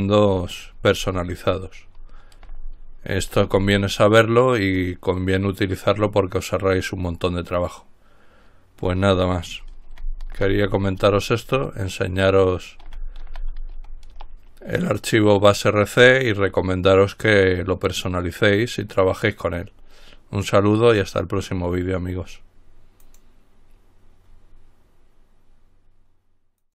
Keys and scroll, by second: 9.9-11.6 typing, 11.7 Return, 13.1-13.9 typing, 14.3 Return.